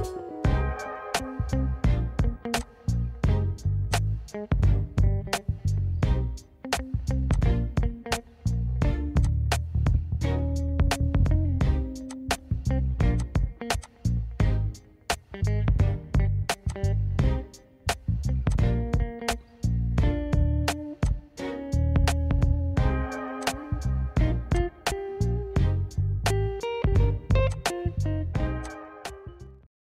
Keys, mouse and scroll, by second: 2.7 click, 4.0 click, 6.9 click, 7.4 click, 9.3 click, 12.2 click, 13.3 click, 13.9 click, 16.8 click, 18.6 click, 21.1 click, 23.6 click, 24.6 click, 27.6 click.